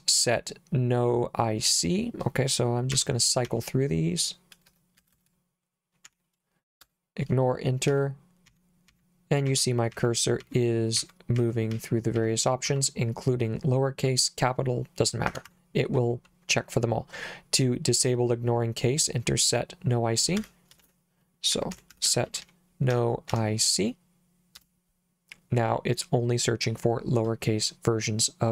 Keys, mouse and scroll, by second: 2.9 n, 3.5 n, 4.7 BackSpace, 5.0 BackSpace, 5.1 BackSpace, 6.1 e, 6.8 Return, 7.9-12.7 typing, 15.3 Escape, 15.5 Escape, 20.4 Escape, 20.8-23.3 typing, 24.6 Return.